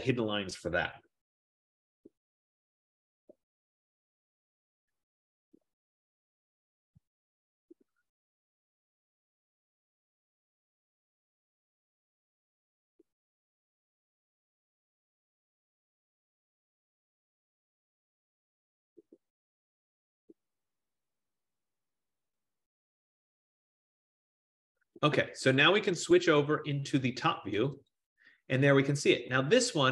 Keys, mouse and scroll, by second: 26.2 click, 26.7 click, 27.7 click, 28.5 click, 29.1 scroll, 29.8-29.9 scroll.